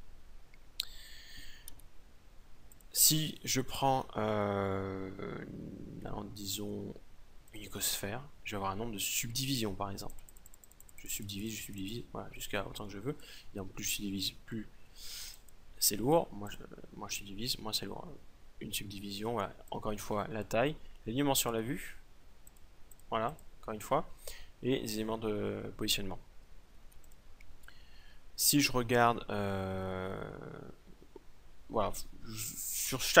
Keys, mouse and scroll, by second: 1.2 w, 2.0 x, 3.4 shift+a, 9.6-14.3 drag, 14.8-17.9 drag, 19.2-24.7 drag, 26.4 x, 27.5 shift+a.